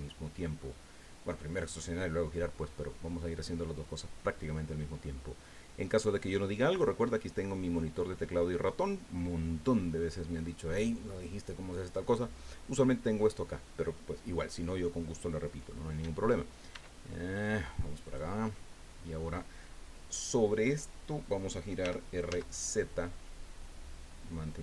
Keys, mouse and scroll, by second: 16.7 e, 18.0 click, 21.8 r, 22.3 z.